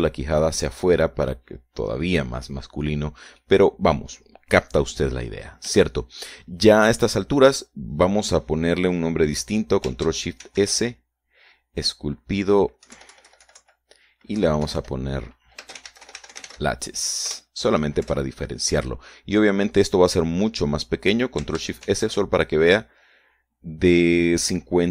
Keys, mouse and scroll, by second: 0.0 click, 2.4-4.2 drag, 4.3-4.6 scroll down 1, 4.9 click, 5.9-6.5 scroll down 1, 6.5-6.8 scroll up 1, 7.4 shift+click, 8.0 shift+scroll down 2, 8.6 scroll down 2, 9.1-9.4 scroll up 2, 12.0 ctrl+shift+s, 13.4 click, 14.4 Right, 14.6 Left, 15.9 Left, 17.1-18.5 typing, 18.8 Return, 19.6 Return, 23.4 ctrl+shift+s.